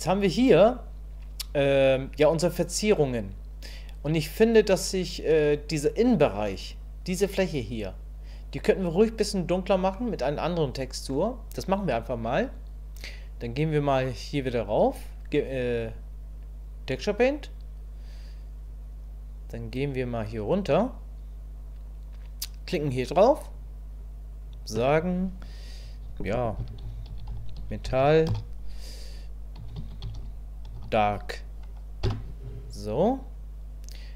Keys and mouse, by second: 10.0-11.1 middle drag, 15.8-17.0 drag, 24.5-33.3 drag.